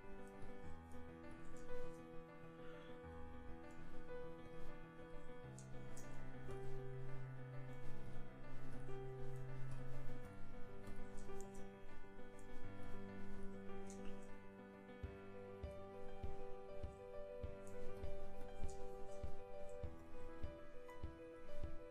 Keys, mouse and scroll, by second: 1.9-3.0 middle drag, 4.4 middle click, 12.6 middle click, 14.4-16.0 middle drag.